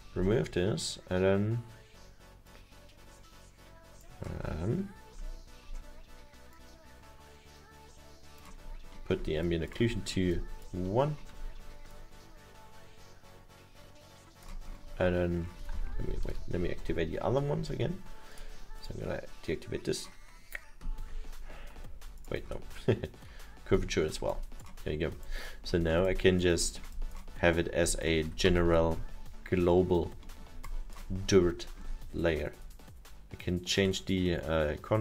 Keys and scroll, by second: 16.0 ctrl+z, 17.2 ctrl+z, 25.9 alt+7.